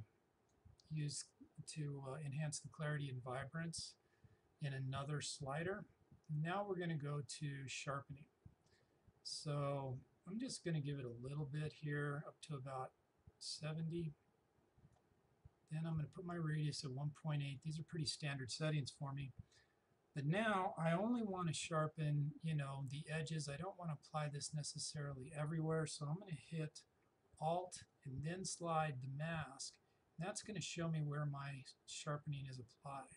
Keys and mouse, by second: 7.0 click, 10.5-20.2 drag, 27.3 alt+Num_Lock, 27.9 alt+click.